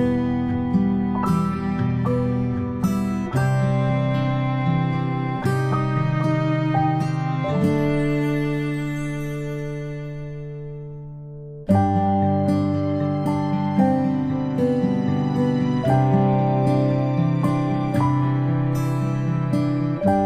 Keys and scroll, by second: 4.3 ctrl+p, 7.2 ctrl+z, 8.8 ctrl+z, 9.6 ctrl+z.